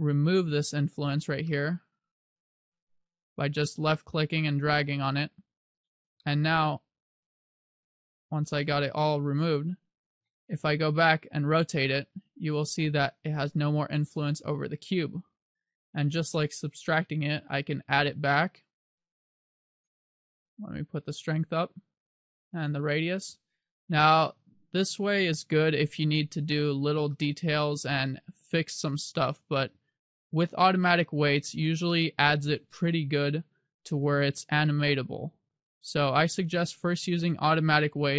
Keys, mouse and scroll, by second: 1.6 middle click, 3.3 click, 6.3 middle click, 7.1 click, 8.7 middle click, 10.3 KP_7, 11.9 r, 15.6 right click, 16.9 click, 19.3 click, 21.2 click, 24.2 click, 24.7 click, 27.3 middle click, 30.5 click, 32.0 middle click, 34.5 click, 37.9 KP_7.